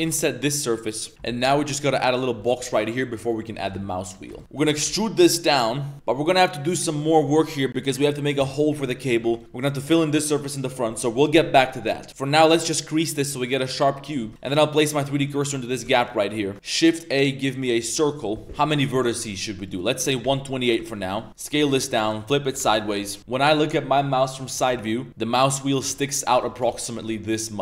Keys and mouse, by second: 1.1 z, 1.7 middle click, 1.9 z, 2.2 click, 2.4 shift+middle drag, 2.7 Tab, 3.2 middle click, 3.6 shift+middle click, 3.9-4.7 typing, 4.1 click, 4.3 ctrl+shift+click, 4.4 ctrl+z, 5.9-6.4 middle drag, 6.1 z, 7.8 middle click, 8.9 middle click, 9.2 Tab, 9.3 click, 10.1 middle drag, 10.8 middle click, 11.6 middle drag, 12.1 Tab, 14.1 Tab, 14.3 click, 14.3-16.5 typing, 14.9 shift+click, 15.7 click, 16.3 drag, 16.4 Tab, 19.6-20.8 drag, 21.3 Tab, 21.3 1, 21.3 s, 21.5 r, 23.2 Tab, 23.2 KP_1, 23.2 KP_3, 25.4-27.6 typing.